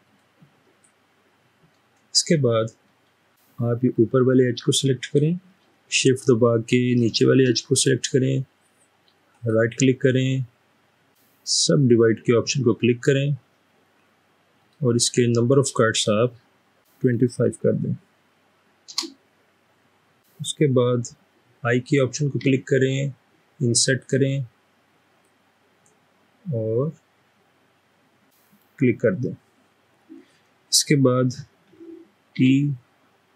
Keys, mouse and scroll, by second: 0.1 click, 3.0 scroll up 4, 3.0 middle click, 3.2 middle click, 3.8 click, 6.9 click, 9.3 right click, 14.6 click, 17.2 typing, 18.9 Return, 21.8-22.4 typing, 32.5 e.